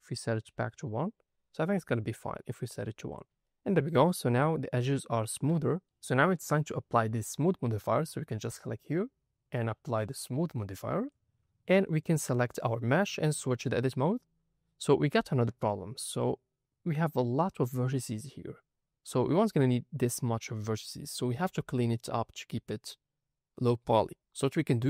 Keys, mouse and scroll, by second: 0.8-2.1 scroll down 7, 2.3 shift+middle click, 3.0 click, 3.4 shift+click, 3.4 shift+middle click, 4.2-5.1 scroll up 2, 5.1 click, 5.5 shift+middle drag, 5.8 n, 8.6-10.0 drag, 10.9 click, 11.8 click, 12.4 click, 12.8-13.3 scroll up 3, 13.3 Tab, 14.6-15.0 scroll down 2, 15.2 shift+middle click, 15.8-16.7 scroll up 5, 18.7-19.5 scroll down 1, 19.9 scroll down 4, 21.0 shift+middle click, 22.5-24.1 scroll down 2.